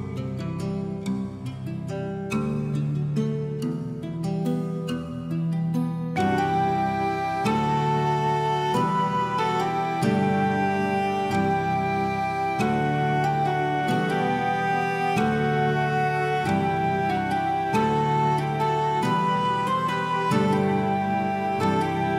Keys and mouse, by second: 0.0 click, 0.6 alt+middle click, 0.8 alt+middle click, 1.0 shift+middle click, 1.2 Tab, 1.7 middle click, 2.2 middle click, 2.7 alt+middle click, 3.1 shift+middle click, 3.5 middle click, 4.5 shift+middle click, 4.9 middle click, 5.4 alt+middle click, 5.7 shift+middle click, 6.1 shift+middle click, 6.4 Tab, 7.0 Tab, 7.5 Tab, 7.9 g, 8.5 click, 9.1 g, 10.7 right click, 11.0 click, 11.3 g, 11.6 right click, 11.8 click, 12.6 g, 13.4 click, 13.6 middle click, 13.8 Tab, 13.9 alt+middle click, 14.3 shift+middle click, 14.8 middle click, 14.9 middle click, 15.4 alt+middle click, 15.5 alt+middle click, 15.8 shift+middle click, 16.1 Tab, 16.3 click, 16.5 middle click, 16.8 click, 17.1 g, 18.2 right click, 18.4 click, 19.0 middle click, 19.5 shift+click, 19.6 alt+middle click, 19.9 middle click, 20.3 shift+click, 20.4 alt+middle click, 20.7 g, 21.4 click, 22.0 g.